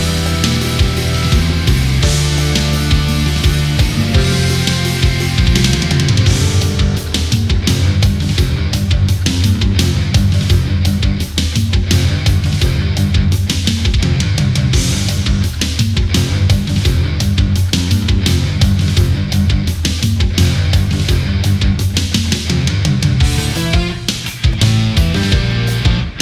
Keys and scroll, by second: 0.1 space, 15.3 space.